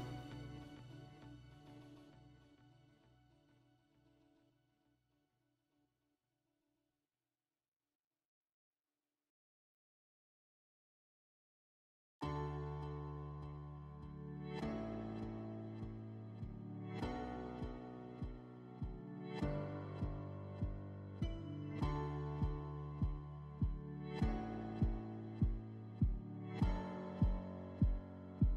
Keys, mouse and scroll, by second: 1.3 click, 3.4 click, 4.6 click, 5.5 click, 6.9 right click, 9.0-10.6 middle drag, 11.1-12.7 drag, 14.9 click, 21.3-22.9 drag, 23.5-25.1 right drag, 26.6-28.2 drag.